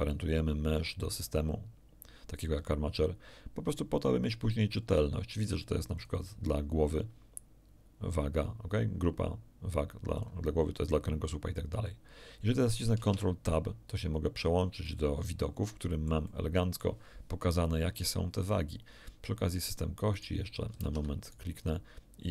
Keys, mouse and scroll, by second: 5.9 click, 10.1 click, 12.9 ctrl+Tab, 14.8-16.9 middle drag, 20.1 click, 20.7 ctrl+Tab, 21.2 ctrl+click.